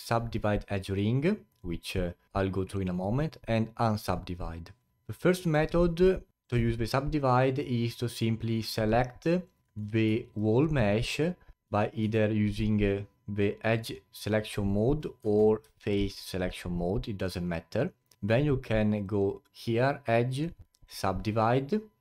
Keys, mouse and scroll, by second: 4.9 alt+click, 5.8-6.3 scroll up 3, 6.3-9.2 alt+drag, 9.6 alt+middle click, 9.9-11.4 scroll down 1, 11.4 scroll down 1, 11.6 a, 15.7-18.4 alt+drag, 19.0-22.0 drag.